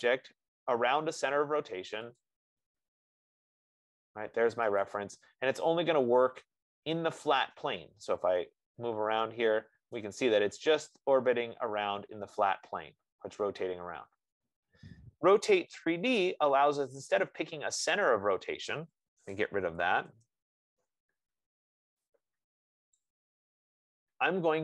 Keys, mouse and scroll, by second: 2.5 click, 5.2 click, 10.3 right click, 15.1 middle click, 16.2 Escape, 16.7 middle click, 18.3 right click, 19.8 Delete, 23.3 click.